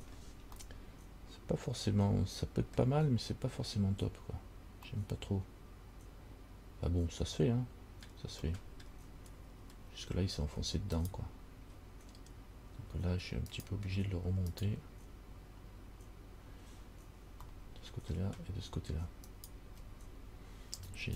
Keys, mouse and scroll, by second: 0.2 scroll down 4, 0.9 middle click, 3.3-3.7 scroll up 3, 5.1 middle click, 8.7 middle click, 9.7-11.2 scroll up 2, 11.2 alt+right click, 14.7 right click, 17.7 middle click, 19.5 shift+right click, 20.9 g.